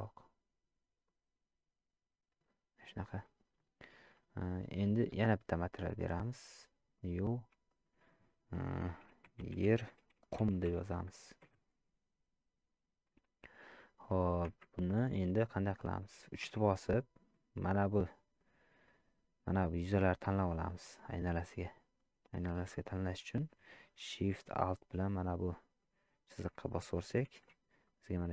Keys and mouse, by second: 5.6 click, 6.9 click, 7.7-11.6 drag, 16.5 3, 19.1 click, 20.8-22.4 middle drag, 25.1 alt+shift+click, 27.4 shift+z, 27.8-28.3 middle drag.